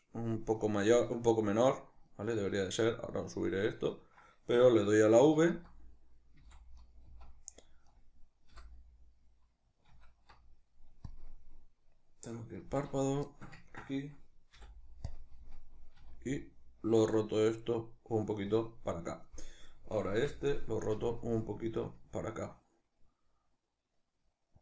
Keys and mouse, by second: 5.5 z, 6.9 right click, 7.1 z, 7.9 right click, 8.6 l, 9.9 alt+q, 13.3-18.6 shift+middle drag, 14.6 ., 16.1 r, 18.6 click, 19.7 right click, 20.2 l, 21.0 r.